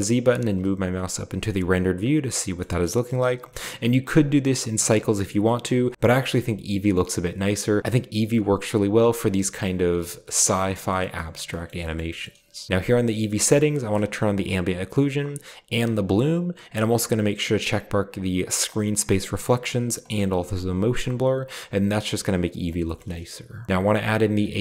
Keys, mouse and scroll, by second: 1.5-3.7 middle drag, 1.5-2.5 scroll down 1, 2.7-3.6 scroll up 1, 3.4 typing, 4.2 click, 7.8-9.2 drag, 9.6-9.9 drag, 10.9 shift+middle click, 11.7-12.7 shift+middle drag, 13.8-14.7 drag, 15.8 click, 17.0 click, 18.7 click, 20.0 click, 22.5-23.1 shift+middle drag, 23.1-23.7 shift+scroll up 1, 23.7 ctrl+b.